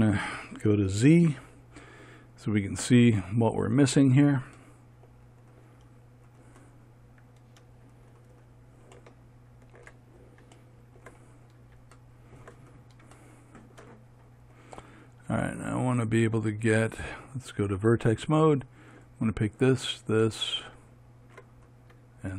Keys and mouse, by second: 1.7 z, 19.4-22.3 right drag.